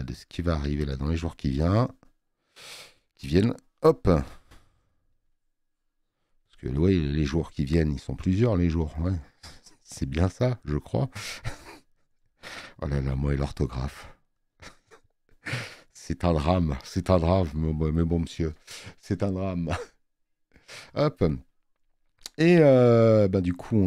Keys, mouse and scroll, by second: 4.3 click, 4.3 space.